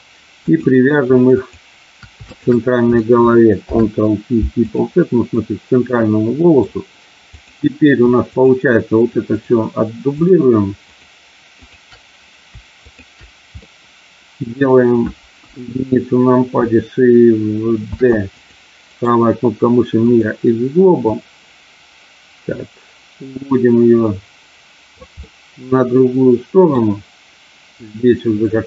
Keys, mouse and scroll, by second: 0.5 click, 2.2 shift+click, 3.5 ctrl+p, 5.4-6.6 middle drag, 7.4 click, 8.2 shift+click, 9.2 shift+click, 10.9 shift+click, 12.8 shift+click, 13.6-14.6 middle drag, 15.3 KP_1, 17.8 shift+d, 18.3 click, 18.8-20.2 right drag, 21.1-25.0 drag, 25.2-26.6 middle drag, 27.7-28.6 drag.